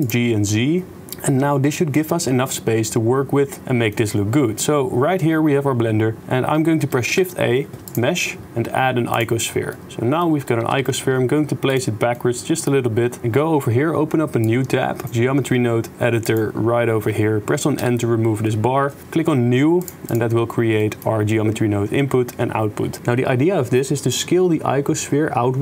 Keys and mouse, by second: 0.0 g, 1.1 middle click, 1.1 click, 1.2 middle click, 2.2 click, 2.2 middle click, 2.4 click, 2.4 middle click, 2.6 click, 3.2 middle click, 3.4 middle click, 3.9 middle click, 4.7-6.2 middle drag, 7.1 shift+a, 9.8 middle click, 9.8 click, 12.1 click, 12.6 click, 14.5-16.3 drag, 17.9 n, 20.7 middle click.